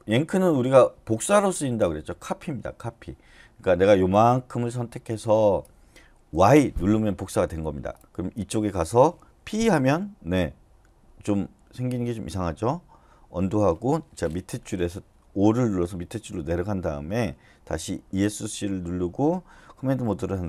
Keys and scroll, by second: 6.3 y, 9.4 p, 13.4 u, 18.0 Escape.